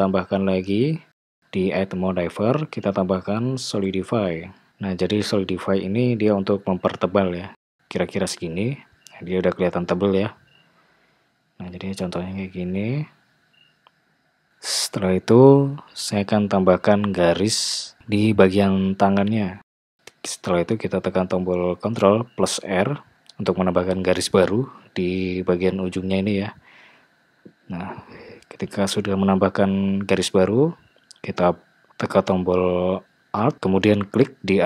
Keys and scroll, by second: 15.3 Tab, 23.1 ctrl+r.